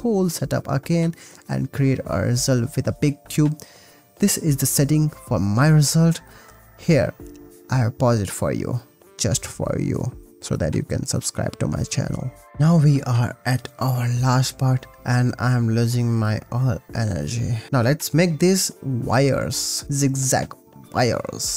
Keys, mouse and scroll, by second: 0.7 click, 14.3 click, 14.7 click, 15.4 click, 16.2 click, 17.3 click, 18.1 shift+d, 19.1 click, 20.1 click, 20.5 click, 20.8 click.